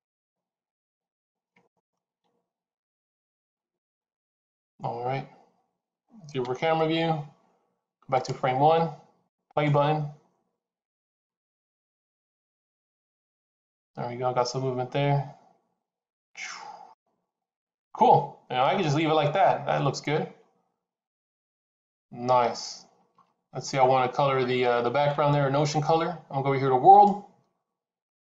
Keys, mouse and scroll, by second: 1.6 click, 2.1 r, 3.6 click, 6.3 KP_0, 8.0 click, 26.8 click.